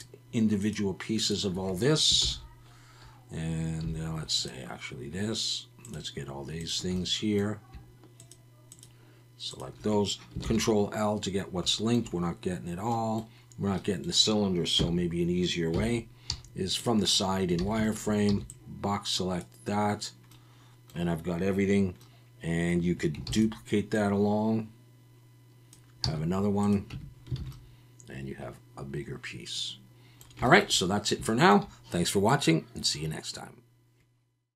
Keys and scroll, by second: 2.2 ctrl+l, 3.8 3, 10.4 ctrl+l, 14.8 KP_1, 15.7 KP_3, 16.3 z, 17.8 alt+a, 18.3 b, 23.3 shift+d, 26.0 z, 26.9 Tab, 27.4 alt+a.